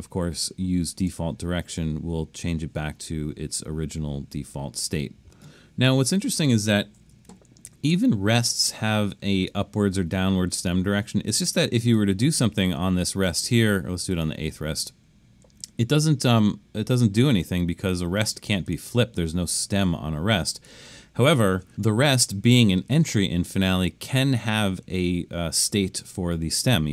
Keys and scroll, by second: 7.3 super+=.